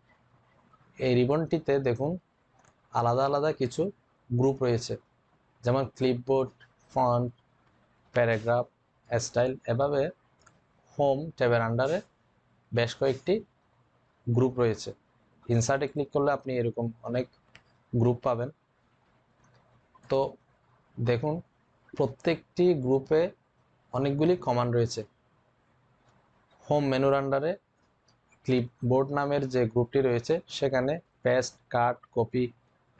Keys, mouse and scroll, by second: 15.6 click, 17.5-18.3 typing, 19.7-20.4 typing, 19.9 click.